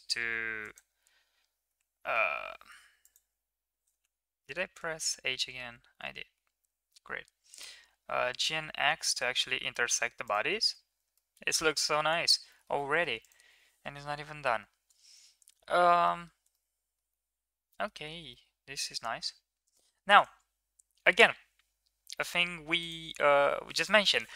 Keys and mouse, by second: 0.4 click, 1.5 h, 1.6 c, 3.8 Tab, 4.6 Tab, 5.2 ctrl+z, 5.5 ctrl+z, 5.8 ctrl+z, 6.2 ctrl+z, 7.3 g, 9.0 Tab, 9.5 middle drag, 10.5 ctrl+s, 11.0-11.5 middle drag, 12.0 ctrl+s, 12.3 middle drag, 12.6 middle click, 13.0 click, 14.1 KP_1, 15.8 middle drag, 16.3-16.8 middle drag, 17.0-17.7 middle drag, 17.7 click, 18.1-18.7 middle drag, 19.3 Tab.